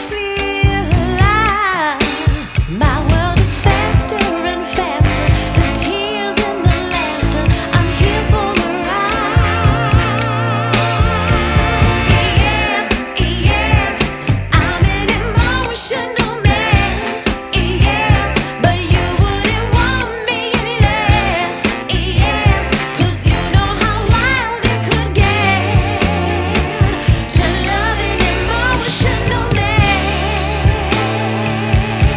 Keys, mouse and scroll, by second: 4.5 click, 6.9 KP_0, 9.4 scroll up 2, 9.6 scroll down 1, 9.9 scroll up 1, 10.1-11.4 scroll down 3, 11.4-12.1 scroll down 1, 12.1-12.4 scroll up 1, 12.4 scroll down 1, 13.3 scroll up 1, 13.4-14.2 scroll down 6, 14.2 scroll up 1, 14.5-15.4 scroll down 3, 15.5-16.0 scroll down 3, 16.0-17.2 scroll up 5, 18.3 click, 21.8 F10, 23.4 scroll up 1, 23.5 scroll down 1, 23.5 scroll up 2, 23.7 scroll down 1, 24.2-25.3 scroll up 4, 25.3 click, 27.3 click.